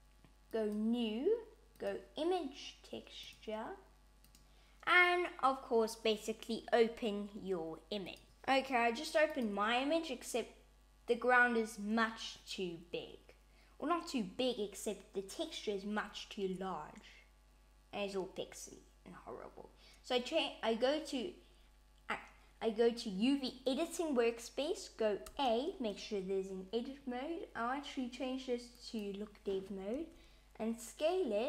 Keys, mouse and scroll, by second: 0.4 click, 1.7 click, 4.5 click, 9.2 click.